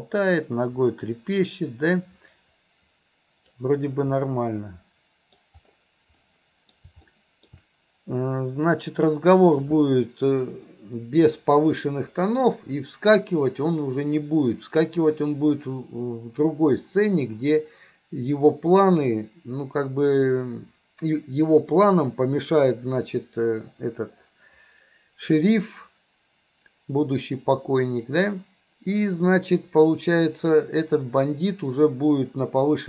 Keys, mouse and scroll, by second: 4.3-5.4 middle drag, 6.3-6.8 middle drag, 7.1-7.5 middle drag.